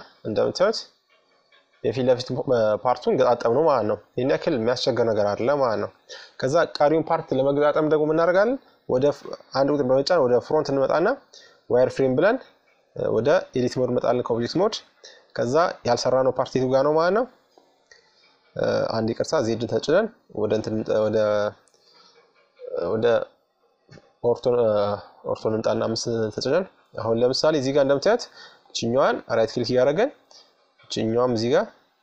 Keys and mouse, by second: 4.5-6.3 drag, 5.0 KP_3, 6.4 middle click, 7.0 KP_1, 9.0-10.7 drag, 12.1-13.7 drag, 13.8 click, 17.4 z, 19.1-20.8 right drag, 20.2 KP_5, 21.1 KP_Subtract, 24.9-26.8 middle drag, 27.2-28.9 right drag, 28.3 f, 30.1 middle click, 31.6-32.0 right drag.